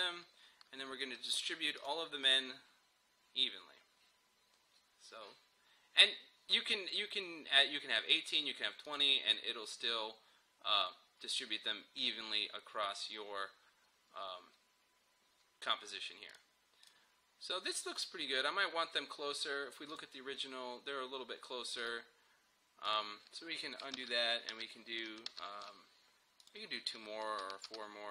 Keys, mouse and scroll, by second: 8.1 click, 16.3 click, 20.0 click, 24.0 ctrl+z, 26.4 click, 27.4 ctrl+d.